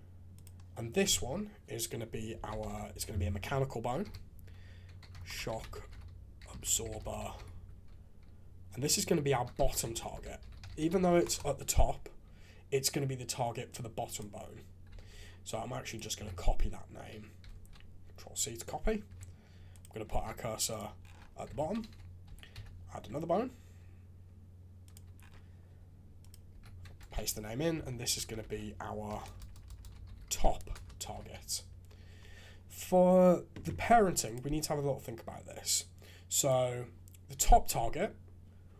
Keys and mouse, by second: 0.3 click, 1.0 F2, 9.8 t, 14.9 alt+a, 15.8 click, 16.1 F2, 19.7 click, 20.1 shift+s, 21.4 alt+a, 22.2 g, 26.2 click, 26.5 F2, 27.9 Left, 28.0 Left, 28.3 Left, 29.2 BackSpace, 29.4 BackSpace, 29.8 BackSpace, 31.2 alt+a, 34.2 click, 37.3 g.